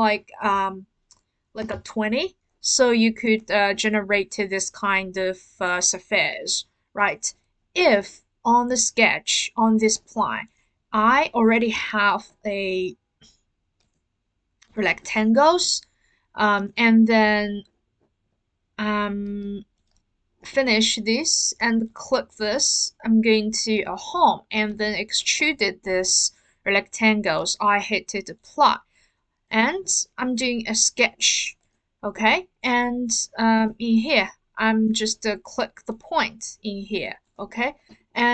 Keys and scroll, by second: 1.6 typing, 4.3 typing.